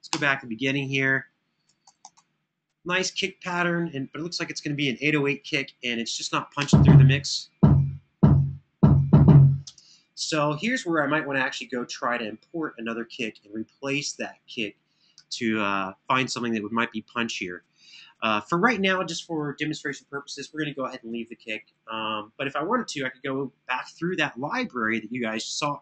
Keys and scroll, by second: 1.6 super+], 1.8 super+], 6.3 space, 9.5 space.